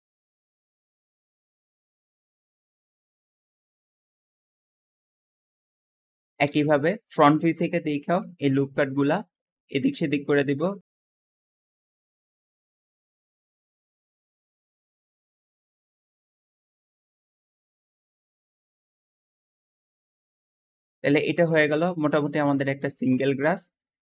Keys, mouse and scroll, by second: 0.0-4.6 typing, 0.0 shift+middle click, 1.3 click, 2.1 click, 3.5 click, 5.0 Tab, 5.2 middle click, 5.7 Tab, 6.1-7.9 middle drag, 7.9 KP_1, 10.2 click, 10.9 alt+z, 12.1 b, 12.2 drag, 12.4 scroll up 2, 12.8-13.1 shift+middle drag, 13.1 shift+click, 13.4 alt+a, 13.5 b, 13.9 click, 14.3 alt+shift+middle click, 14.8 alt+a, 14.9 b, 15.4 click, 15.6 alt+a, 15.7 b, 16.2 click, 17.0 alt+a, 17.1 b, 17.1 drag, 17.6 click, 18.3 alt+a, 18.4 b, 18.4 drag, 18.8 click, 19.0 Tab, 19.2 alt+z, 19.9-22.7 middle drag, 22.9-24.0 shift+middle drag.